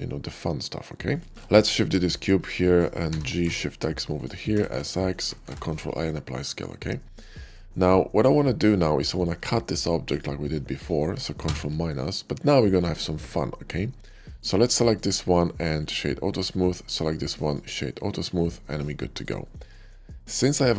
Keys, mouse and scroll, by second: 1.0 click, 1.3 shift+d, 1.9-2.9 right drag, 2.9 g, 3.4 shift+x, 4.1 click, 4.4 s, 4.6 x, 5.0 click, 5.3 ctrl+a, 5.7 click, 6.4-7.0 middle drag, 7.2 shift+middle drag, 7.6-8.1 shift+middle drag, 8.4 shift+middle drag, 8.9 shift+click, 9.9 shift+click, 11.3 ctrl+KP_Subtract, 12.9 middle drag, 14.3 click, 14.8 right click, 15.7 click, 16.1 click, 16.9 right click, 17.2 click, 18.3-19.1 middle drag, 19.3 shift+middle drag, 19.9-20.6 shift+middle drag.